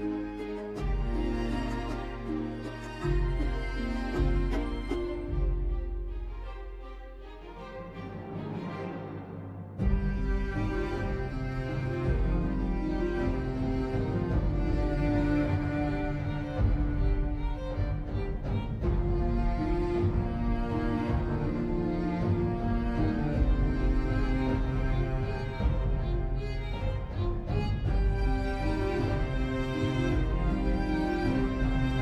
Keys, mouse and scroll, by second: 9.0 6, 9.2 Return, 22.2 typing, 23.0 Return.